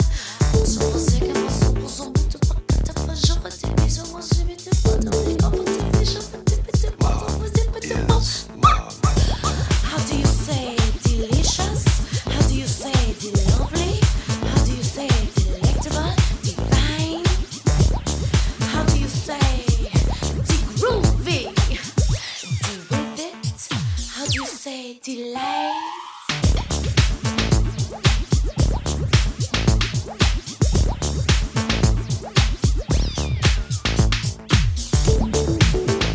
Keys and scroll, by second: 16.1 Escape.